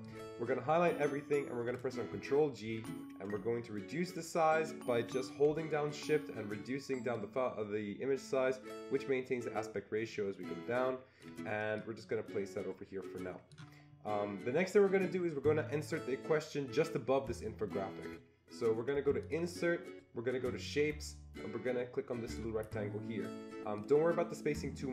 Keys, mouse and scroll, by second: 0.3-1.6 drag, 2.6 ctrl+g, 7.2-16.0 shift+drag, 19.2-22.2 shift+drag, 22.2 click, 23.8-24.9 drag.